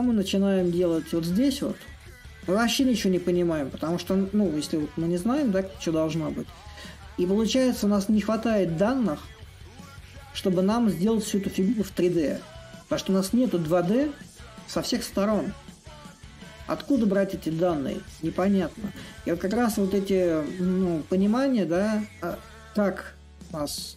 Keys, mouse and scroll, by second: 0.0-5.0 drag, 6.4-11.4 middle drag, 13.1-23.6 middle drag.